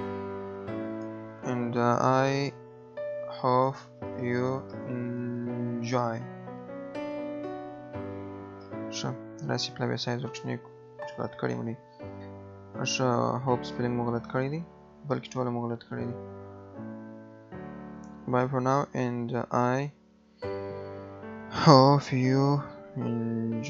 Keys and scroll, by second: 9.0 ctrl+a, 15.2 Right, 17.4 BackSpace.